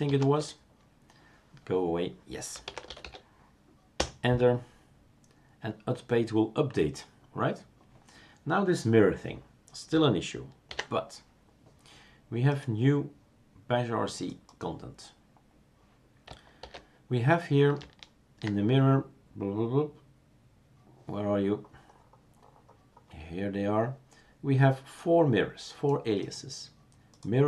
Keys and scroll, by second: 0.0-0.6 typing, 4.0 Return, 4.0 typing, 10.7 ctrl+c, 16.6 super+f.